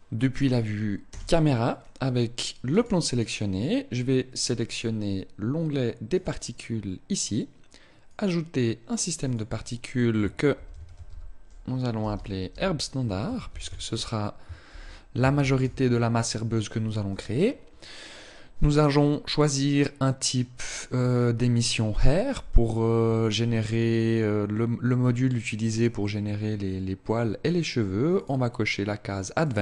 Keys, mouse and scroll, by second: 0.7 KP_0, 2.3 right click, 5.7 click, 7.7 click, 8.9 click, 18.5 click, 27.8 click, 29.1 click.